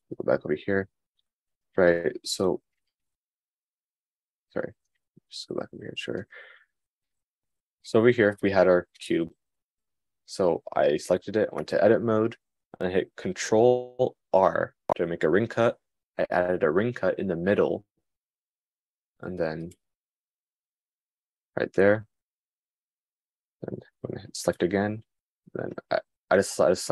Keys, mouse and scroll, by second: 3.7 super+z, 4.7 super+z, 5.3 super+z, 5.6 super+z, 7.2 super+z, 7.6 super+z, 8.2 super+z, 8.6 super+z, 12.2 Tab, 14.8 super+r.